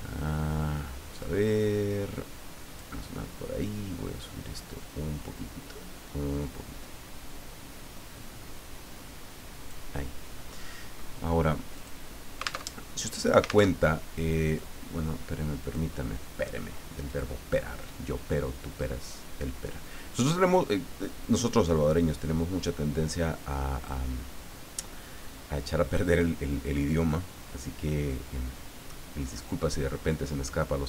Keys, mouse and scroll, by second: 1.2-3.1 drag, 3.6-9.9 drag, 11.7 click, 12.7 alt+Tab, 13.7 alt+Tab, 14.4 click, 15.6 click, 17.1 click, 19.0 click, 21.2-24.1 drag, 26.2-29.9 drag.